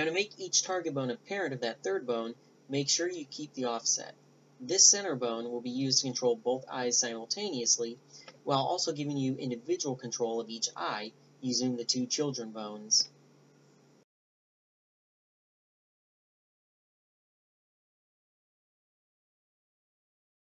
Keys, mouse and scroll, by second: 0.3 ctrl+alt+s, 3.4 s, 4.8-5.9 drag, 6.1 BackSpace, 9.0 right click, 15.1 right click, 16.7-19.2 right drag, 20.1-20.4 right drag.